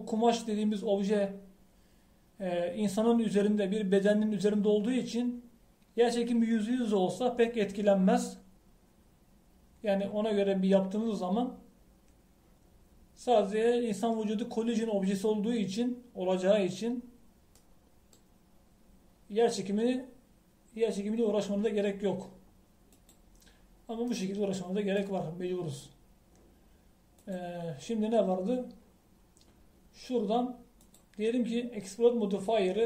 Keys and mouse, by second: 18.8 middle click, 24.2-25.9 middle drag, 28.2-32.8 drag.